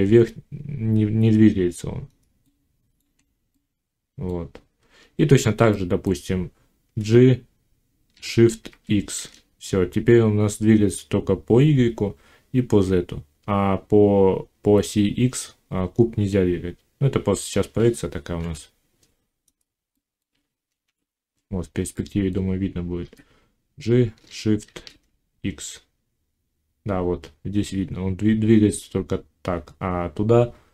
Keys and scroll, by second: 6.7 g, 8.5 shift+x, 22.8 g, 24.5 shift+x.